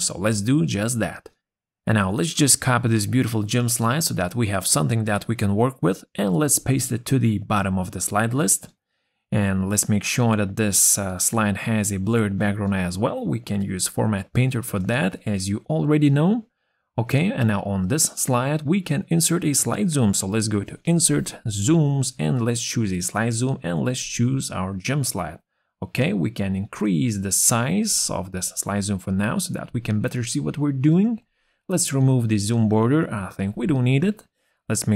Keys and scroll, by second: 2.4 ctrl+c, 14.0 ctrl+z.